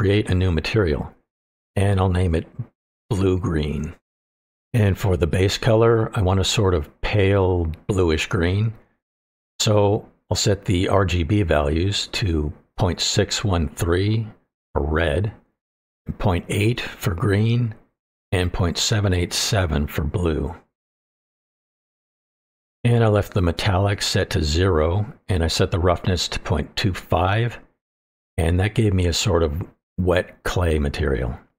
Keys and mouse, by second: 0.5-6.6 drag, 3.7 e, 9.0 click, 25.9-28.1 drag.